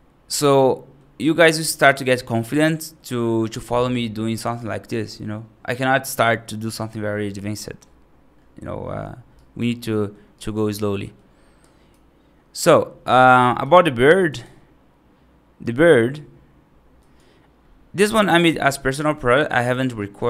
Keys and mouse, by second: 1.2-1.7 right drag, 2.6 middle drag, 3.5 right drag, 4.3 middle drag, 9.3 right drag, 9.7 middle drag, 10.2 right drag, 10.7 middle click, 11.5 right click, 13.6-17.2 drag, 18.0 right click.